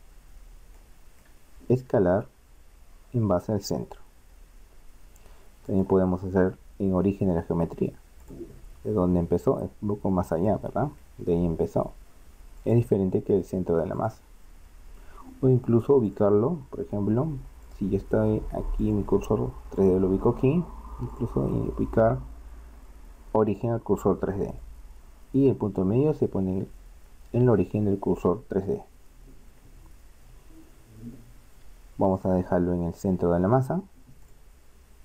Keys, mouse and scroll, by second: 0.8 middle click, 1.6 s, 5.7-7.5 drag, 10.5-12.5 drag, 12.6 click, 16.1 click, 27.2 r, 32.2-33.8 drag.